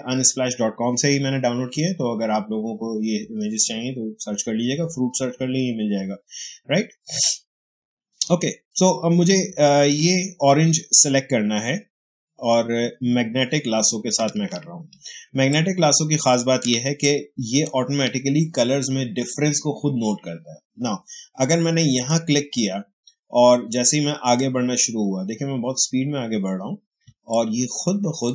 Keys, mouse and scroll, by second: 14.1 space, 15.4-20.2 ctrl+drag, 21.8 click, 26.9 space, 27.2 click, 27.4 space.